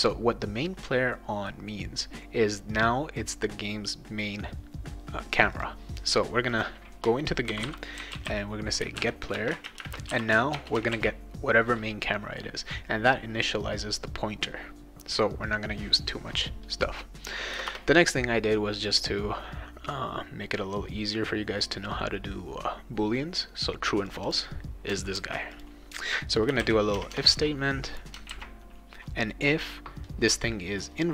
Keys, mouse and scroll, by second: 5.5 click, 6.5 click, 7.2-10.6 typing, 10.9 ctrl+s, 17.5 Return, 24.1 click, 24.2 click, 24.9-25.3 ctrl+scroll up 2, 25.2 ctrl+c, 25.5 click, 26.2-27.1 typing, 28.3 ctrl+v.